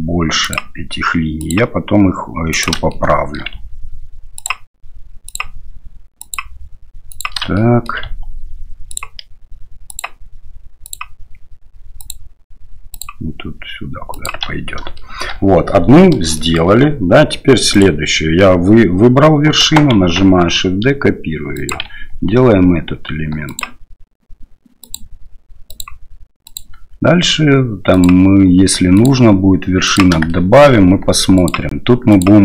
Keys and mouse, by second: 0.4 ctrl+click, 1.5-2.7 ctrl+drag, 2.9 shift+middle click, 5.3 ctrl+click, 7.6-7.9 shift+middle drag, 9.9 ctrl+click, 12.0 ctrl+click, 13.0-14.3 ctrl+drag, 15.0 shift+middle drag, 16.4 shift+middle click, 17.7 right click, 19.9 shift+d, 25.8 ctrl+click, 29.0 ctrl+click, 30.3 shift+middle click, 31.4 ctrl+click, 32.2-32.4 ctrl+drag.